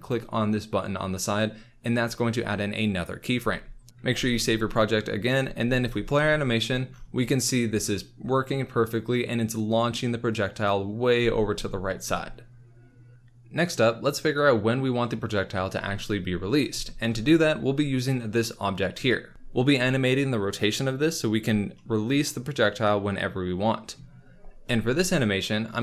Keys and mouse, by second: 0.0 click, 3.9 ctrl+s, 4.2 ctrl+s, 5.6 space, 11.1 space, 16.8 shift+middle drag, 21.7 middle click.